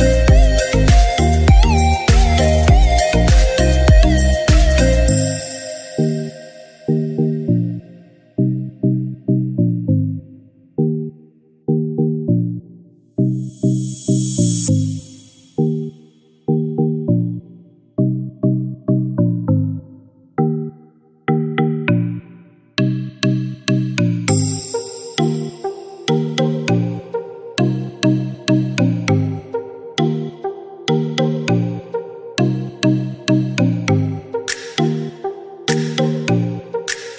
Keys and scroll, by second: 4.5 typing, 5.9-10.0 typing, 12.8-16.6 typing, 19.9 typing, 21.8 typing, 23.6-24.1 typing, 25.8 typing, 27.3-31.7 typing, 33.3-35.8 typing.